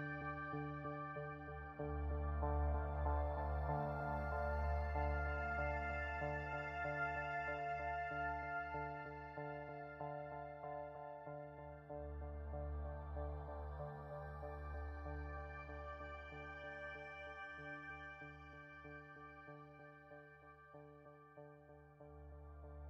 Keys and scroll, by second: 4.7 Delete.